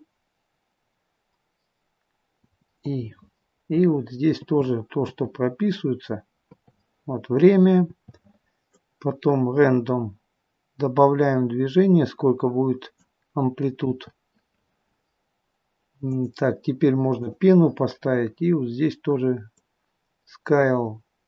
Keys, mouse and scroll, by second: 4.2 i, 5.0 i, 7.8 i, 8.6 click, 16.1 click, 17.1 click.